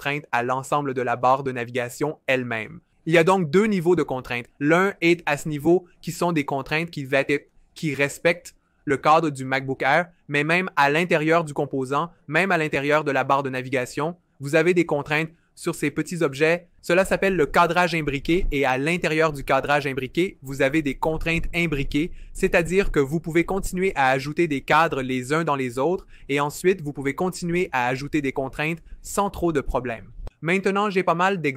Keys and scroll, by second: 7.6 v.